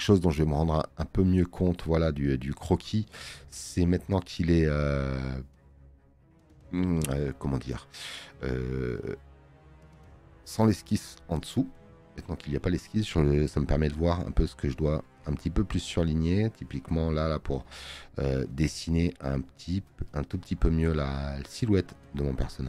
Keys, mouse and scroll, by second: 3.6 space, 3.8 click, 11.8 space, 12.0 click, 12.4 click, 18.2 space.